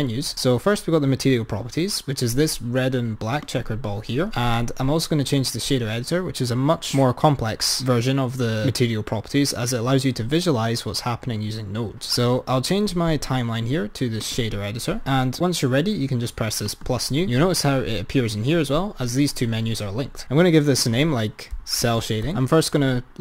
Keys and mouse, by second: 3.6 click, 12.8-15.1 drag, 16.8-18.9 drag, 20.2-22.2 drag, 22.8 click.